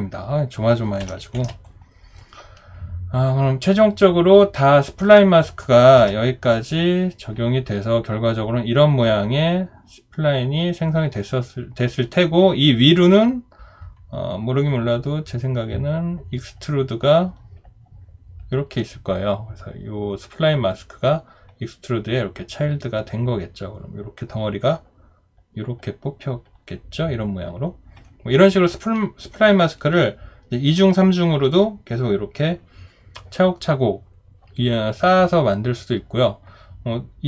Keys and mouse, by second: 1.0 Delete, 1.4 ctrl+d.